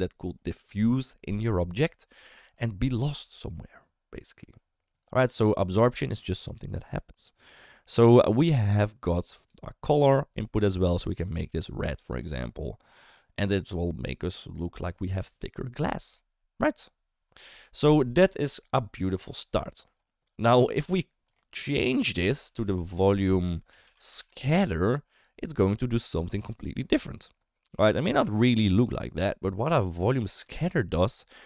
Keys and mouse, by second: 6.0-9.4 drag, 9.9 click, 21.2 click, 21.4-21.9 drag, 22.3 ctrl+x, 22.7 shift+a, 25.9 click.